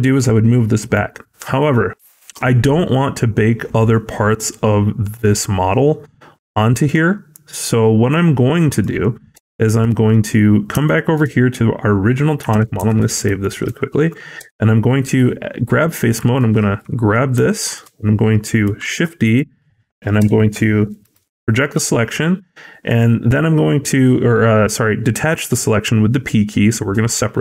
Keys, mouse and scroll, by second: 8.6 click, 9.2 Tab, 10.7 shift+middle click, 12.7 ctrl+s, 13.3 shift+middle click, 13.7-14.1 scroll up 1, 14.3 3, 16.2 alt+click, 17.4 shift+middle click, 18.7 shift+d, 20.1 p, 21.6 Tab, 22.7 click.